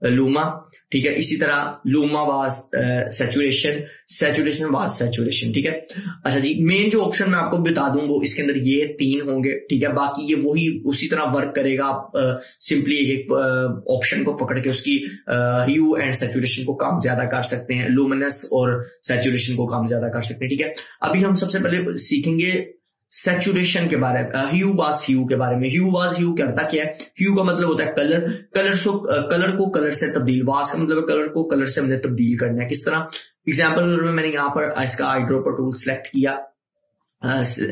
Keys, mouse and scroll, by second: 2.9 scroll down 1, 6.0 scroll down 1, 6.1 scroll up 1, 9.3 scroll down 1, 10.4-12.1 scroll down 1, 12.4 scroll up 1, 17.4 scroll down 1, 20.0 scroll up 1, 36.1 scroll up 1, 36.3 click.